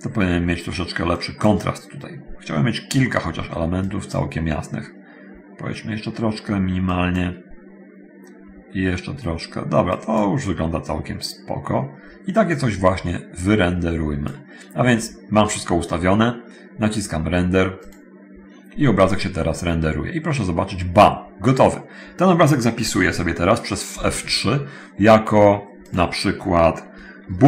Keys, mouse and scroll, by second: 1.4 click, 4.0 click, 7.1 click, 10.1 click, 12.0 middle click, 13.4-14.6 drag, 20.3 middle click, 24.1 F3, 26.0 click.